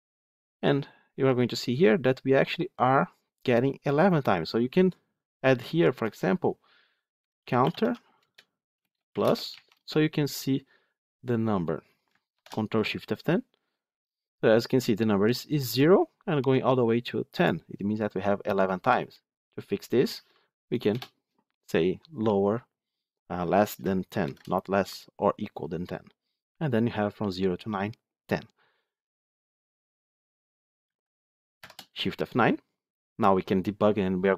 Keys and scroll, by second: 8.1 Return, 12.2 ctrl+shift+F10, 31.5 shift+F9.